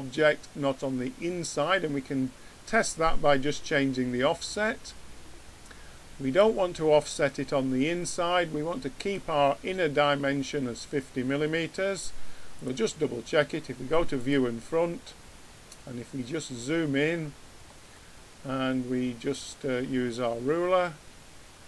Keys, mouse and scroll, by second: 12.5-14.3 drag.